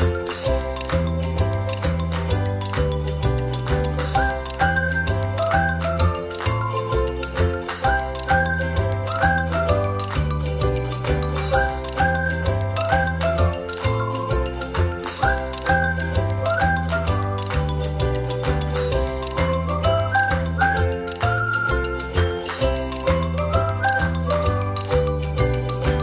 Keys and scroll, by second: 0.6 ctrl+z, 1.0 ctrl+z, 1.8 Delete, 15.1 ctrl+-, 15.7 ctrl+=, 24.2 ctrl+z, 24.4 ctrl+z.